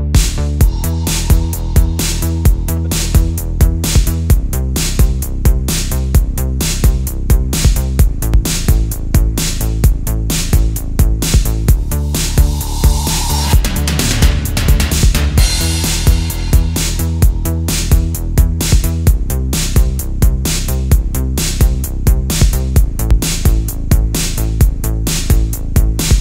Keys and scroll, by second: 1.6 space, 2.6 super+z, 4.0 super+z, 4.5 super+z, 5.1 super+z, 5.7 super+z, 6.5 super+z, 8.2 space, 9.9 super+z, 11.9 space, 13.2 space, 13.9 super+space, 14.1 super+z, 15.0 space, 16.4 space, 17.3 space, 18.2 space, 18.8 super+space, 19.1 super+space, 19.6 super+space, 20.1 super+z, 20.2 space, 20.6 space, 21.4 super+z, 23.1 space, 23.5 space, 25.4 space, 25.8 space.